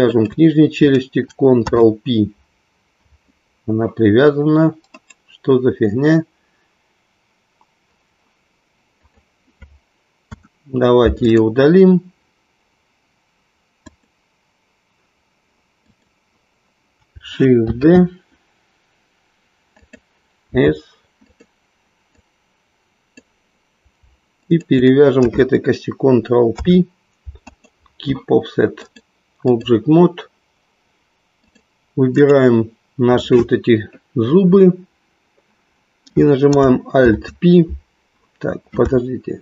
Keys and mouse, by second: 1.5 ctrl+p, 4.9-7.9 right drag, 10.2 Delete, 15.9 click, 17.8 shift+d, 20.8 s, 21.2 click, 22.1-23.2 drag, 24.4 shift+click, 27.0 ctrl+p, 28.8-29.8 drag, 31.4 click, 32.2-35.5 right drag, 36.9 ctrl+p.